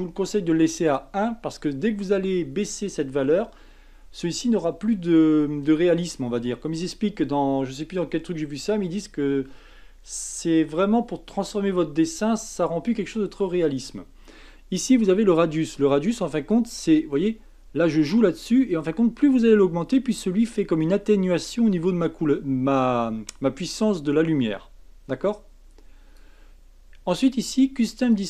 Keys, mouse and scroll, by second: 15.3-18.4 drag, 28.0 click.